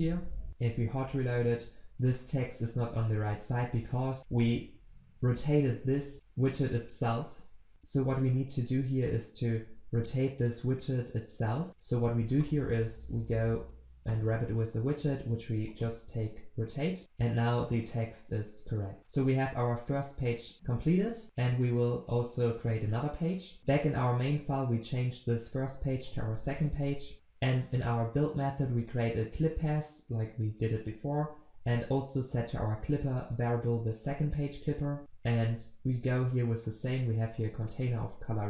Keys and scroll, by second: 12.4 alt+Return, 17.0 ctrl+s.